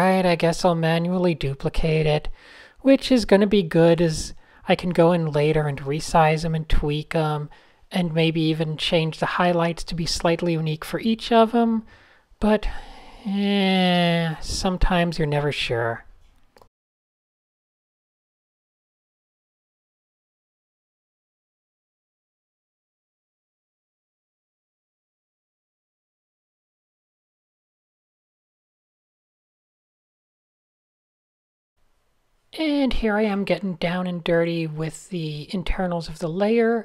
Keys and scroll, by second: 0.6 super+z, 1.4 a, 3.7 super+z, 8.7 super+z, 9.3 super+z, 13.4 shift+super+a, 14.8 super+z, 16.3 super+s, 17.6 a, 19.0 shift+super+a, 19.4 Tab, 19.6 super+0, 20.2 Tab, 20.9-23.5 typing, 21.4 super+h, 21.5 super+h, 21.8 alt+super+a, 23.4 shift+super+a, 25.0-25.9 typing, 26.4 super+z, 27.2 super+h, 27.2 Right, 27.5 Up, 27.5 Up, 27.7 Right, 27.8 Right, 29.1 Right, 29.3 Right, 29.4 Up, 29.7 Up, 30.4 Right, 30.5 Up, 32.8-36.0 typing.